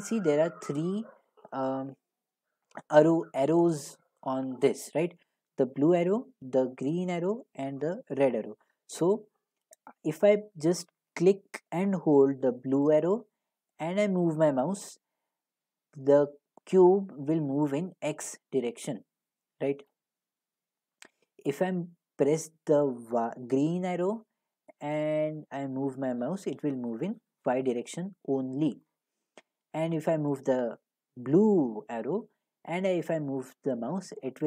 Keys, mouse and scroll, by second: 1.0-3.9 scroll, 19.9-25.0 drag, 28.8 click.